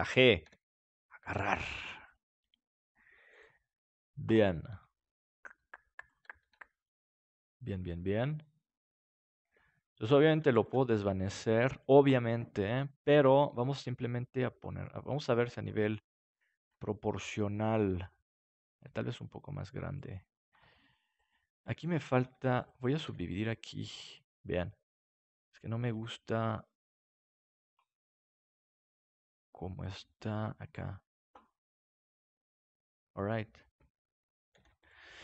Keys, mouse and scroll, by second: 0.4 g, 1.7 click, 2.3 g, 3.3-5.5 drag, 3.5-5.0 right drag, 6.0-7.2 right drag, 6.5 g, 7.3-9.4 drag, 7.3-8.7 right drag, 8.8-10.0 right drag, 9.4 g, 10.1 click, 10.1 right click, 10.5 ctrl+s, 12.9 click, 12.9 right click, 14.5-17.2 middle drag, 16.7 Tab, 18.7 s, 20.1 click, 20.5 Tab, 21.1 click, 21.1-24.7 right drag, 23.0 w, 25.0-26.1 right drag, 25.9 g, 26.1 click, 27.7-29.4 drag, 28.1-29.4 right drag, 28.3 g, 30.2-31.9 drag, 33.8 Tab, 34.5 ctrl+s.